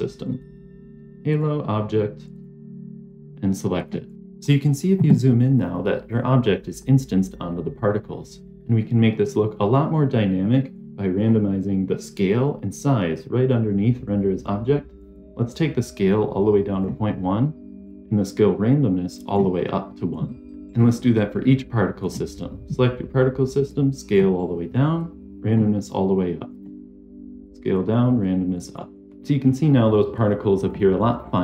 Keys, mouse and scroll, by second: 2.3 click, 4.1 scroll down 4, 4.4-4.7 middle drag, 4.4-4.7 scroll down 1, 5.5 scroll down 1, 5.5 scroll up 1, 5.7 middle click, 6.3-7.4 scroll up 6, 7.4 middle click, 7.9-8.4 scroll up 1, 8.4 middle click, 9.0-10.1 scroll up 1, 10.9 scroll down 1, 11.0 scroll up 1, 11.1-11.4 scroll down 3, 15.0-16.8 drag, 17.8-19.3 drag, 20.7 scroll up 3, 21.9 click, 23.6 click, 24.9-25.4 drag, 26.5 click, 27.4 click, 28.1 click, 29.0 click, 30.1-30.6 drag.